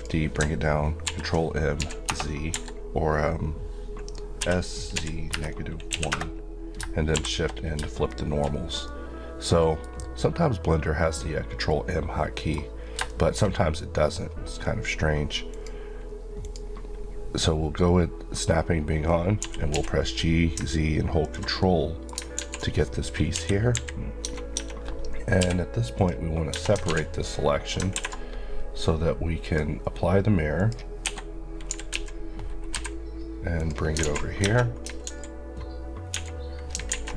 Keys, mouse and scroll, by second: 1.0 ctrl+m, 1.8 z, 2.1 Return, 2.5 Escape, 4.4 s, 4.9 z, 5.3 KP_Subtract, 5.9 KP_1, 6.1 KP_Enter, 7.2 shift+n, 8.1 shift+middle click, 8.5-8.8 shift+scroll up 2, 8.8 middle click, 13.1 middle click, 15.5 click, 19.4-19.7 typing, 21.2 ctrl+click, 21.6 middle click, 22.4 alt+z, 23.3 alt+KP_1, 23.7 KP_3, 24.3 Tab, 25.4 p, 26.0 click, 26.5 Tab, 26.9 alt+z, 27.2 click, 29.4 click, 31.0 click, 31.1 Escape, 31.7 typing, 33.6 click, 34.0 alt+z, 34.3 scroll up 1, 34.4 Tab, 35.1 alt+z, 36.1 1, 36.9 alt+a.